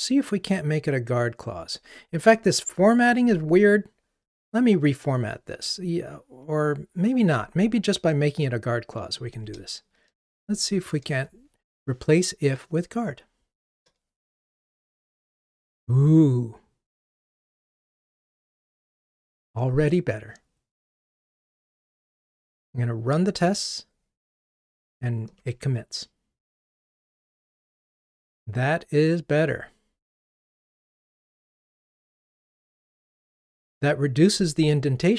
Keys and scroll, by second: 10.3 alt+Return, 23.4 ctrl+r.